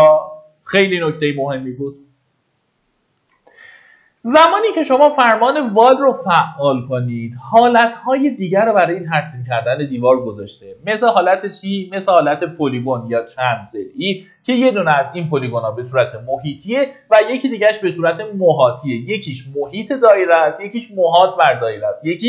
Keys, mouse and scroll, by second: 0.4 scroll down 1, 2.9 middle click, 3.8 typing, 8.0-9.3 scroll.